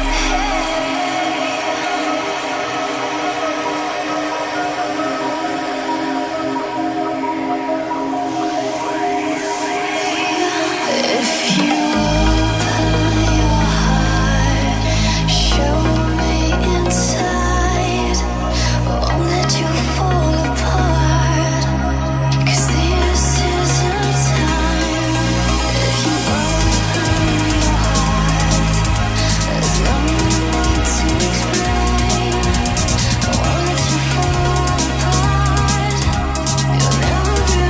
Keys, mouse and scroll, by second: 1.6 click, 4.9-6.5 typing, 7.3-9.1 drag, 15.7-17.0 typing, 23.7 KP_3.